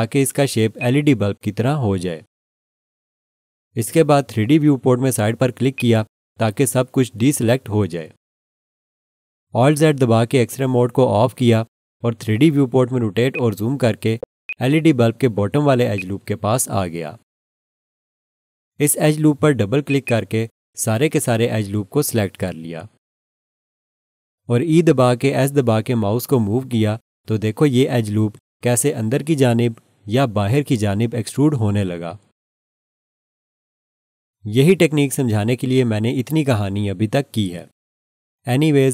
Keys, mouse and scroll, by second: 0.8 click, 5.7 click, 10.5 alt+z, 13.3 alt+click, 14.0 scroll up 1, 14.5 alt+shift+click, 15.2-15.6 scroll up 1, 15.9 alt+click, 19.9 click, 20.0 double click, 25.6 e, 25.9 s.